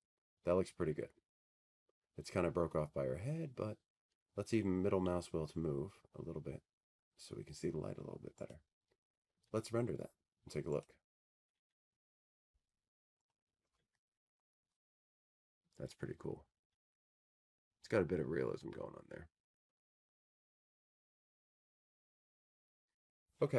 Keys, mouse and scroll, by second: 0.2 click, 1.1 c, 3.2 click, 4.4 click, 12.9 middle click, 14.2 click, 16.5 click, 18.9 click.